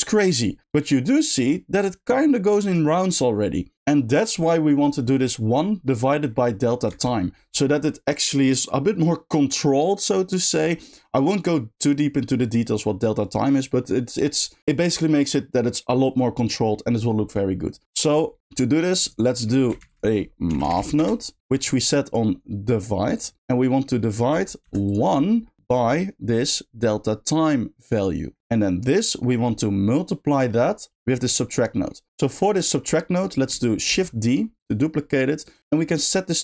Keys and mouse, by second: 6.9 space, 17.8 middle click, 18.3 click, 18.4 g, 19.0 click, 19.3 middle click, 22.1-23.2 shift+drag, 23.8 middle click, 24.3 click, 25.3 middle click, 26.3-28.0 drag, 28.3 middle click, 28.4 click, 30.2 click, 30.6 middle drag, 31.4 middle click, 32.1 x, 34.6 shift+click.